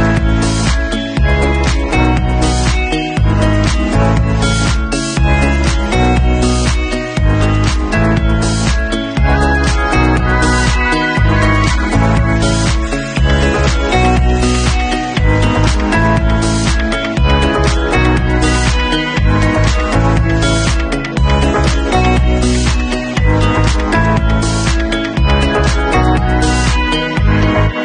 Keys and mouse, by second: 0.4 middle click, 0.9 click, 1.0-2.1 middle drag, 2.1-4.1 drag, 4.1-5.6 middle drag, 5.6 click, 5.7-8.4 middle drag, 8.4 click, 8.5 middle click, 9.4-14.9 drag, 14.9-16.1 middle drag, 19.9-23.7 drag, 26.6 ctrl+s.